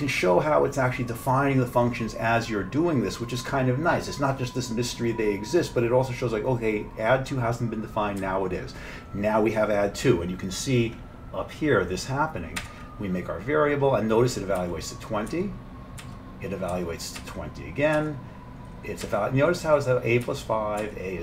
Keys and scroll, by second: 8.2 F7, 12.6 F7, 14.6 F7, 15.3 F7, 16.0 F7, 16.7 F7, 18.0 F7, 19.0 F7, 20.8 F7.